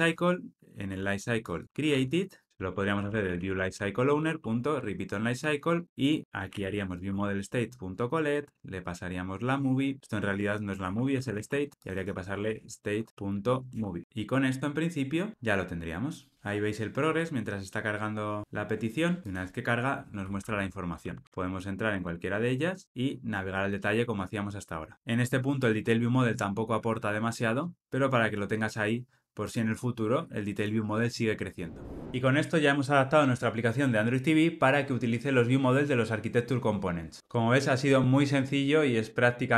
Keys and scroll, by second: 0.8 Tab, 4.0 Return, 4.7 Escape, 5.8 alt+Return, 7.0 Tab, 13.1 Return, 14.0 ctrl+alt+o, 15.3 ctrl+r.